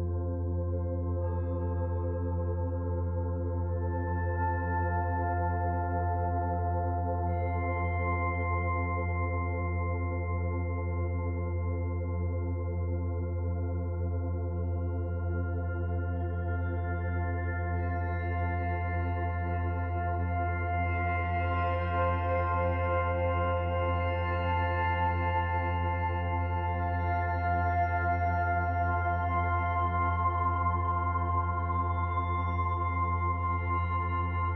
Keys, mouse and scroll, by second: 0.0 shift+middle click, 0.5 shift+middle click, 1.4 middle click, 1.9-2.3 scroll up 4, 2.3 shift+middle click, 3.9 click, 7.5-9.2 scroll down 5, 9.2-9.9 scroll down 3, 10.8 ctrl+z, 11.5 ctrl+z, 13.2 shift+click, 13.8 shift+click, 15.0 s, 18.5 middle click, 19.8-20.6 scroll up 2, 20.6 middle click, 20.6 scroll up 1, 21.2 shift+middle click, 23.0 s, 27.9 middle click, 30.0 click, 30.9 click, 31.2-31.7 scroll down 3, 31.6 middle click, 33.8 scroll down 1, 34.2 shift+middle click.